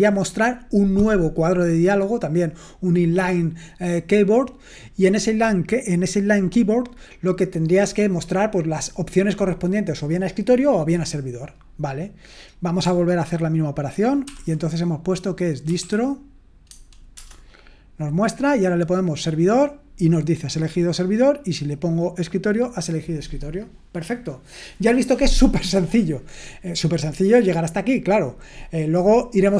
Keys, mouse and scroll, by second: 12.5-16.6 drag, 16.4-17.1 typing, 19.0-21.1 drag, 21.2-27.3 drag.